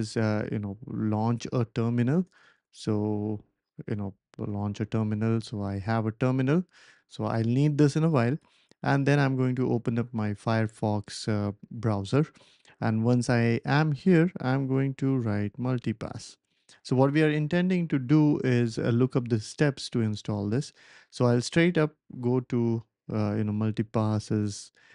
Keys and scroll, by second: 1.9-3.9 typing, 13.8-17.5 typing, 24.5 typing.